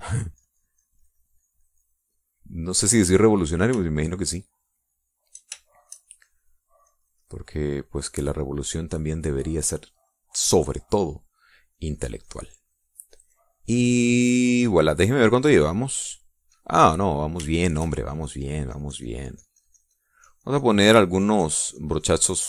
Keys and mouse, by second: 0.5 click, 3.2 middle click, 3.7 middle click, 4.9-6.5 shift+drag, 6.7 shift+click, 8.9 shift+click, 9.9 shift+middle click, 11.1 middle click, 12.8-15.9 drag, 16.7 click, 17.5 click, 18.5-21.9 shift+drag, 22.3-22.4 shift+drag.